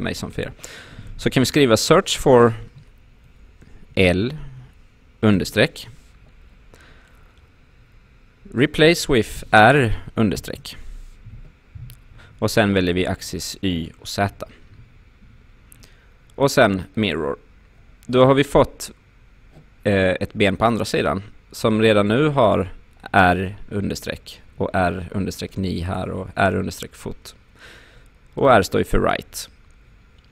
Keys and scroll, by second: 3.9 shift+l, 5.3 shift+-, 9.4 shift+r, 10.4 shift+-.